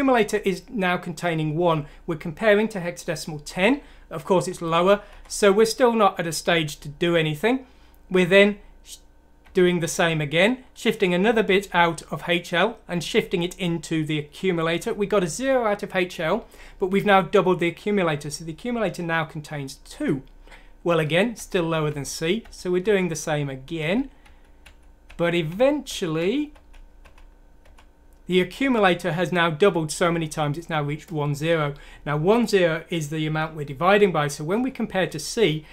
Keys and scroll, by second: 4.4 F7, 5.1 F7, 9.4 F7, 16.1 F7, 20.8 F7, 21.3 F7, 21.8 F7, 23.7 F7, 28.4 F7, 34.5 F7.